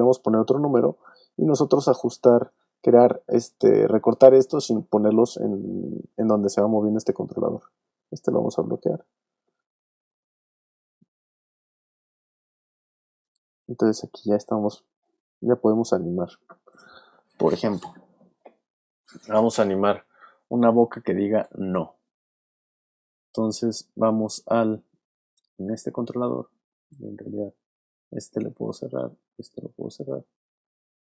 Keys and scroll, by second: 7.1 super+z.